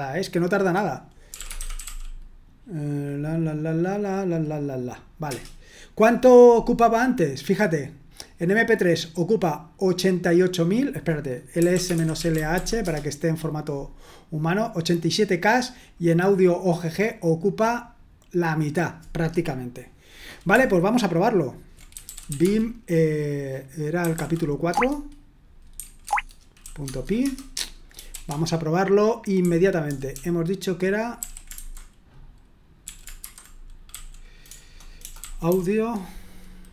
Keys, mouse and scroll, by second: 1.0-2.3 typing, 5.2 Return, 9.1-11.3 drag, 11.4-13.0 typing, 14.9-16.7 drag, 21.7-28.1 typing, 29.2-35.4 typing.